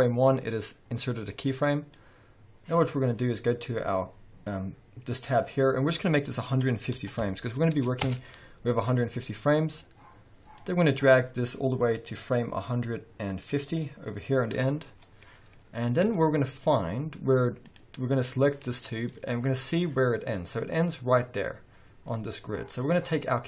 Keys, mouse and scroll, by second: 5.2-16.1 drag, 8.1 Return, 15.0-16.1 scroll down 2, 16.1-17.6 shift+middle drag, 16.7-17.6 scroll up 2, 17.6-18.7 drag, 18.7-23.4 shift+middle drag, 21.4-22.8 scroll down 2.